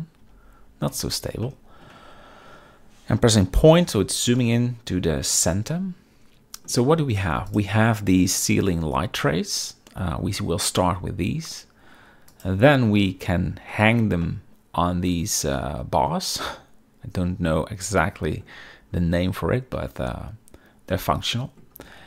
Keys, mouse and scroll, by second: 0.3 n, 1.6-1.9 shift+middle drag, 3.6 KP_Decimal, 4.5-5.1 middle drag, 5.6-6.8 shift+middle drag, 7.6 click, 9.4-10.4 middle drag, 12.4 click, 13.8 shift+middle drag, 14.3-18.5 middle drag, 19.9-21.7 middle drag.